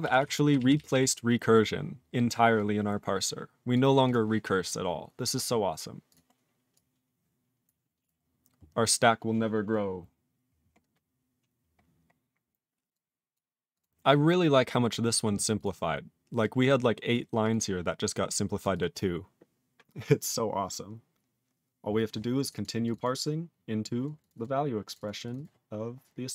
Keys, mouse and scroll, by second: 0.2 ctrl+s, 0.2 ctrl+n, 0.5 ctrl+p, 0.7 ctrl+p, 0.9 ctrl+p, 2.5 click, 3.7 click, 4.0 click, 4.1 click, 4.6 click, 4.7 click, 5.0-5.5 scroll down 1, 5.6-6.1 scroll down 3, 6.1 click, 6.3 scroll down 2, 6.7 click, 7.6 click, 8.0 click, 8.0 click, 8.2-9.1 scroll down 14, 10.8-11.3 scroll down 7, 12.1 scroll down 3, 12.9 click, 13.3 click, 13.7 click, 13.8 click, 15.1 click, 15.4 click, 15.5 click, 15.6 click, 16.4 click, 17.1 click, 17.4 click, 17.5 click, 18.1 click, 18.6 click, 18.7 click, 18.8 click, 22.4 click, 22.5 click, 22.5 double click, 22.6 click, 22.6 double click, 22.8 click, 22.9 click, 22.9 double click, 23.0 double click, 23.8 click, 24.0 click, 24.2 click, 24.2 click, 24.3 double click, 24.4 double click, 24.8 click, 24.9 click, 24.9 double click, 25.0 double click, 25.2 click, 25.3 click, 25.3 double click, 25.4 double click, 25.8-26.3 scroll up 3.